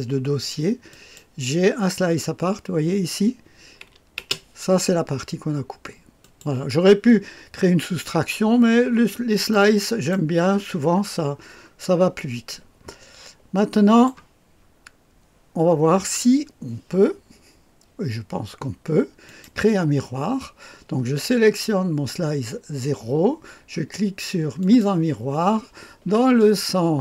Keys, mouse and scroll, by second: 0.9-2.0 drag, 2.2-4.1 scroll up 1, 4.1 space, 6.2 click, 8.7-9.5 scroll down 1, 9.5-10.7 drag, 10.5-11.3 scroll up 1, 11.5-12.5 scroll down 1, 12.5-14.1 drag, 19.2 click, 24.6 click, 26.4-27.0 drag.